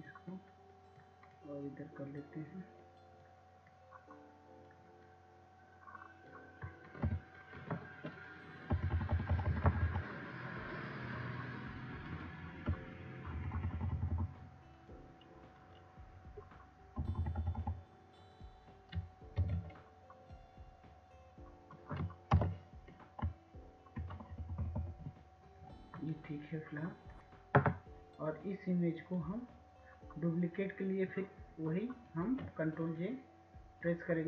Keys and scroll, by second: 10.4 Right, 12.4 Right, 12.9 Right, 13.3 Right, 16.2 Right, 16.7 Right, 17.0 Right, 17.5 Right, 17.7 Right, 20.6 Right, 20.8 Right, 23.0 ctrl+t, 26.0 ctrl+Return, 26.9 Right, 27.4 Right.